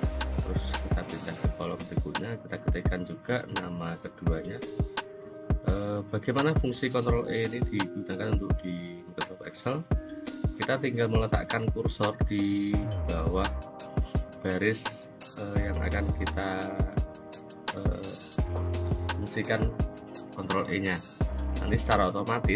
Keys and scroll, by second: 2.9 shift+a, 3.2 z, 3.6 i, 3.9 s, 4.4 Return.